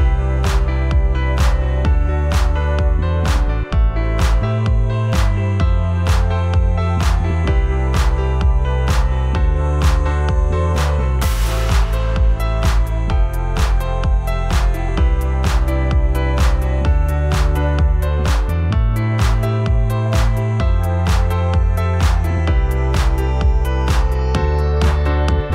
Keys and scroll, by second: 0.4 w, 3.2-7.7 typing, 8.3 ctrl+Return, 9.0 v, 25.1 space.